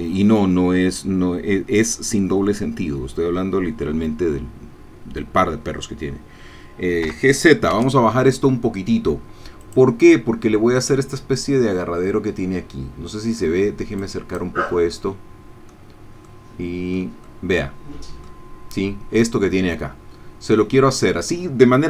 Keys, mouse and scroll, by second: 7.0 g, 7.7 z, 9.6 click, 13.4-15.0 middle drag, 15.0-16.0 drag, 16.2 click, 17.3-18.4 middle drag.